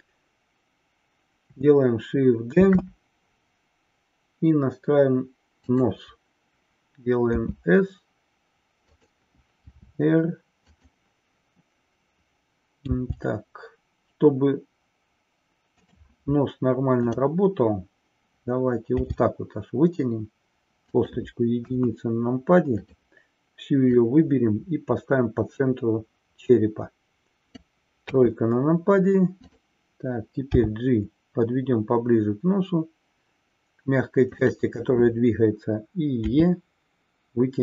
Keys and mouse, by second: 2.5 shift+d, 5.7 click, 16.9 click, 21.1 click, 21.7 KP_1, 22.8-23.2 drag, 23.9-27.4 drag, 28.1 KP_3, 29.3 click, 30.7 g, 34.4 click.